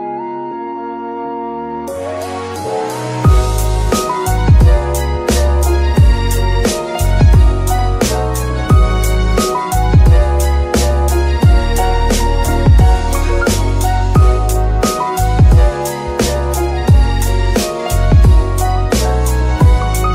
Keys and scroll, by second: 2.0 s, 2.7 Tab, 9.4 Escape, 11.4 shift+n.